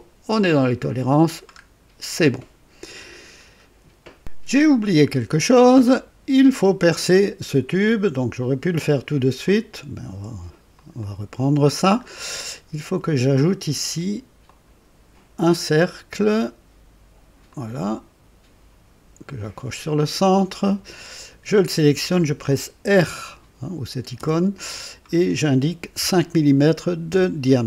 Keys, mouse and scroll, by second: 0.8 click, 1.6 scroll down 2, 2.3-3.1 drag, 3.3-3.6 scroll down 2, 5.0-6.0 drag, 9.4 click, 10.7 click, 12.0 scroll up 1, 14.4 click, 17.4 click, 19.8 click, 20.5 right click, 22.2 click, 24.1 r, 25.9 KP_5, 27.0 Return.